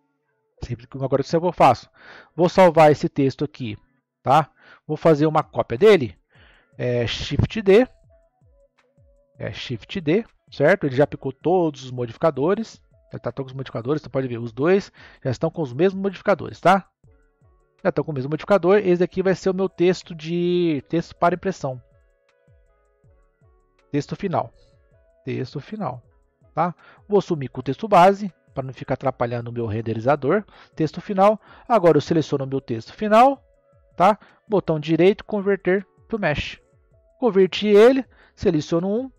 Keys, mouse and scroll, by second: 3.3 click, 7.6 shift+d, 14.3 click, 14.9 click, 15.7 click, 16.6 click, 17.4 click, 18.8 click, 19.0 click, 23.6 BackSpace, 28.5 click, 31.3-32.4 scroll up 2, 32.4 click, 32.9 click, 34.2-37.2 right drag, 37.2-38.2 middle drag, 38.2 click.